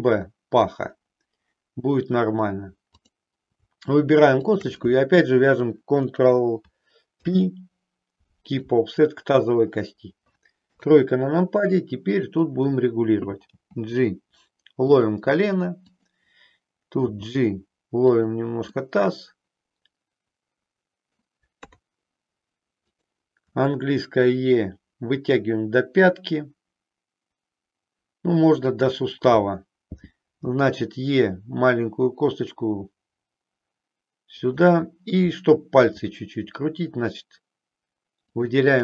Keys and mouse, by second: 3.0 click, 4.5 shift+click, 7.1 ctrl+p, 10.6 KP_3, 12.0 click, 13.4 g, 15.0 click, 15.7 click, 17.1 g, 18.3 click, 18.7-21.3 middle drag, 21.6 KP_3, 23.5 e, 28.7 click, 30.4 e, 34.5 click, 35.9 e.